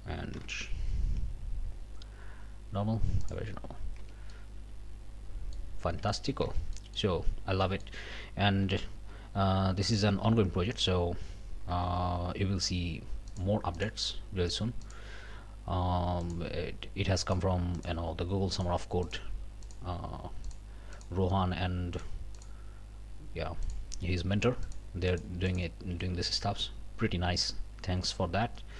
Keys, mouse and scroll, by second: 0.3 q, 3.2 click, 4.0 Tab, 4.3 click, 5.7 scroll up 2, 6.5 shift+Tab, 6.7 shift+middle click, 7.2 shift+scroll up 2, 7.6 middle click, 9.0 3, 9.8 middle click, 11.8 w, 13.3 shift+click, 13.8 shift+click, 14.5 shift+click, 14.8 shift+click, 16.2 shift+click, 17.2 shift+click, 17.7 shift+click, 18.5 shift+click, 19.0 shift+click, 19.6 shift+click, 20.4 shift+click, 20.9 shift+click, 21.9 shift+click, 22.4 shift+click, 23.6 shift+click, 24.6 shift+click, 25.1 shift+click, 25.5 shift+click, 26.0 shift+click, 26.5 shift+q.